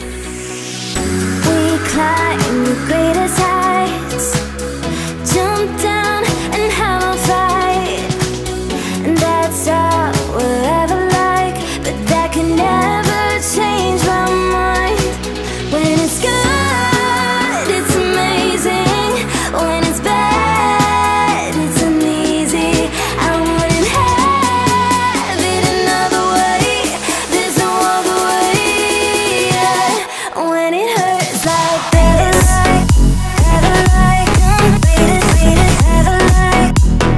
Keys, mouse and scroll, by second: 0.3-1.5 typing, 3.1-4.0 typing, 4.9-7.2 drag, 12.4 click, 17.7-18.5 alt+shift+drag, 23.6-24.4 drag, 26.3 click, 26.4 click, 29.4 click, 29.9-30.4 alt+scroll up 2, 30.7-31.9 alt+shift+drag, 32.1 click, 32.8 alt+scroll down 2, 32.9-33.3 alt+scroll up 2, 33.3 alt+scroll down 2, 34.9 alt+scroll up 2, 36.1 click.